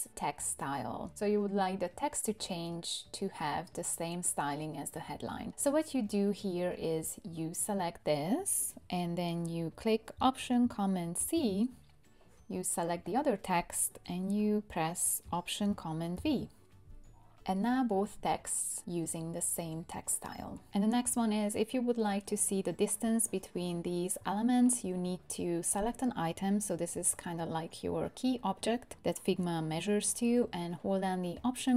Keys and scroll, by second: 11.2 alt+super+c, 16.1 alt+super+v.